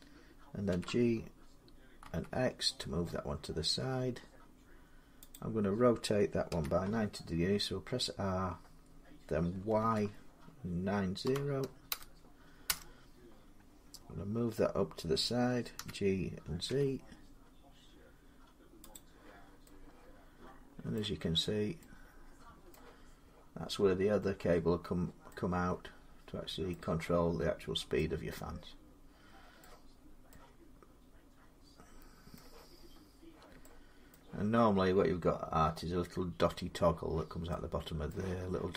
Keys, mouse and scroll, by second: 0.5 g, 1.8 x, 5.1 click, 6.3 r, 9.6 y, 11.0-11.7 typing, 12.5 Return, 15.6-17.0 typing, 18.6 z, 18.7 click, 20.7 middle click, 21.1 scroll, 21.5 scroll up 5, 21.5 g, 22.5 middle click, 26.5 middle click, 29.4 middle click, 29.7 scroll down 5, 32.1 middle click, 32.5 scroll up 4, 32.7 scroll, 33.9 middle click, 35.6-37.1 scroll up 4, 37.9 middle click.